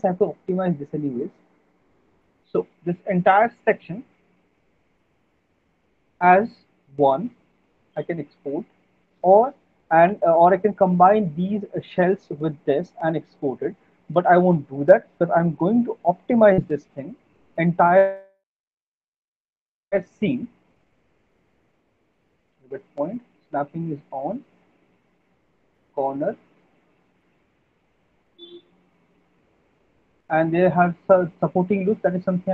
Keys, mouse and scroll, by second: 0.9 middle click, 1.9 click, 3.2 middle click, 4.6 alt+middle click, 4.8 alt+middle click, 5.0 right click, 5.9 alt+middle click, 6.2 middle click, 6.9 alt+middle click, 7.1 middle click, 7.6 middle click, 8.5 alt+middle click, 18.3 alt+middle click, 20.4 click, 21.4 click, 22.6 click, 22.7 alt+middle click, 23.1 middle click, 23.3 middle click, 23.5 alt+middle click, 25.5 click, 25.8 middle click, 26.0 alt+middle click, 26.2 middle click, 26.3 alt+middle click, 26.6 middle click, 26.8 middle click, 29.0 click, 30.0 alt+middle click, 30.2 alt+middle click, 30.7 middle click.